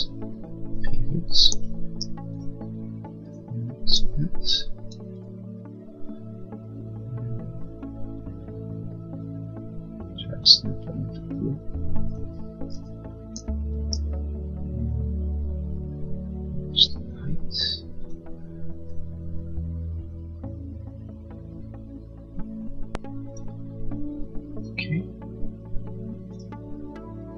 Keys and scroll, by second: 4.7 m, 12.4 Up, 24.6 space.